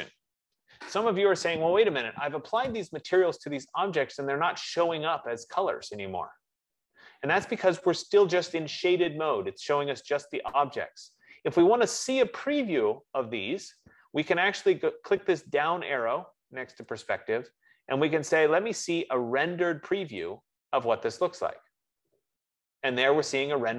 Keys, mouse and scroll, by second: 2.0-8.4 drag, 18.6 click, 21.6 click.